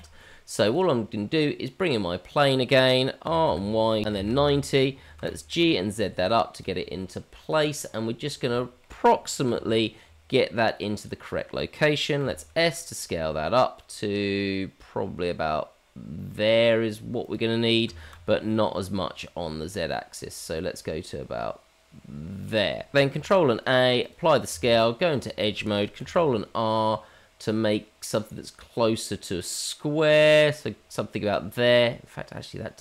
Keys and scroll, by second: 3.2 r, 5.2 g, 9.4 g, 12.2 s, 17.8 s, 23.1 ctrl+a, 24.5 Tab, 26.0 ctrl+r.